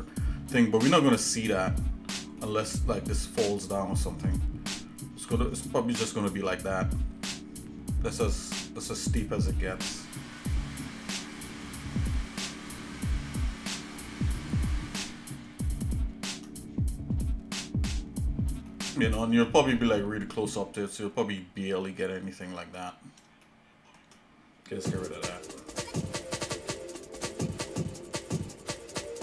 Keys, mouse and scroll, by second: 0.1 shift+middle click, 1.1 middle click, 1.7 scroll down 2, 2.4-5.3 shift+middle drag, 5.6-9.6 shift+middle drag, 10.0 shift+middle click, 11.6 shift+middle click, 16.6 scroll up 1, 17.2 middle click, 18.7-22.6 shift+middle drag, 23.1 scroll down 1, 23.4 shift+middle click, 25.2 Delete, 26.3 shift+middle click, 27.8 shift+middle click, 29.1 shift+middle click.